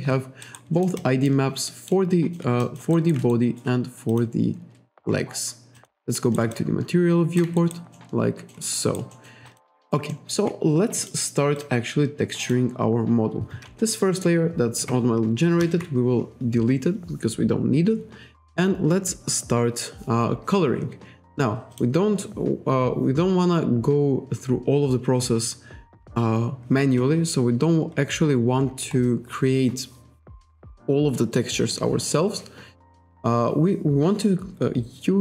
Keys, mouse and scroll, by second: 0.5 alt+right click, 0.8 alt+middle click, 0.8 alt+scroll down 1, 1.0 alt+click, 1.7 alt+middle click, 2.2 alt+click, 2.7 alt+click, 3.0 alt+right click, 3.4 shift+right click, 4.2 click, 5.2-5.6 scroll up 1, 5.8 click, 6.3 alt+right click, 6.6 shift+right click, 7.6 alt+right click, 8.0 alt+middle click, 9.2 alt+middle click, 9.5 alt+click, 9.8 alt+right click, 10.2 alt+middle click, 11.1 click, 11.6 click, 12.5 click, 15.7 Delete, 21.8 click, 27.6-28.1 scroll down 1, 28.7-29.4 scroll up 1, 34.4-34.9 scroll down 1.